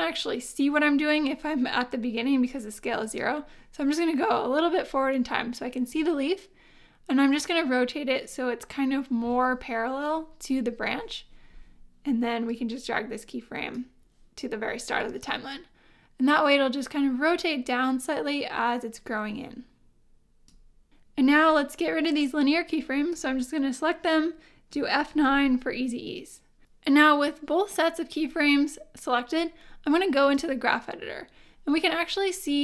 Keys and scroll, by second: 25.1 F9.